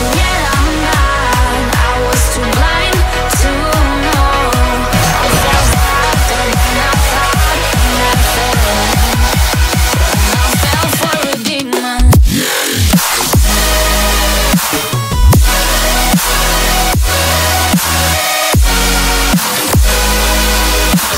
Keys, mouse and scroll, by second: 1.3 shift+click, 2.0 shift+click, 3.9 shift+click, 4.5 shift+click, 5.4 shift+click, 6.1 shift+click, 7.3-8.2 scroll down 6, 8.2 middle click, 15.7 scroll up 1, 17.3-18.0 scroll down 7, 18.7 shift+middle click, 20.4-20.8 scroll up 6.